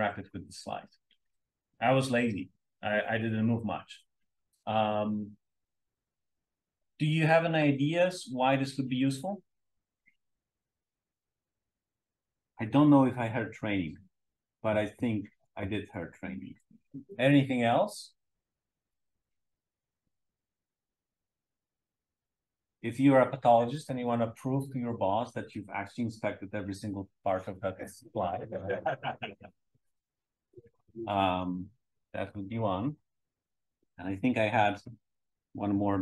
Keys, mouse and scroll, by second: 0.2 click, 30.0 Page_Down.